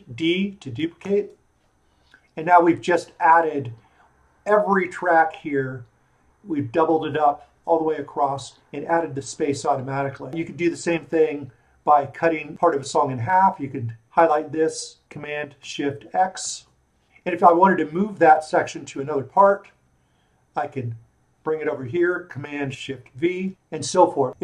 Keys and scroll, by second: 1.0 shift+super+d, 11.1 super+z, 16.4 shift+super+x, 23.5 shift+super+v.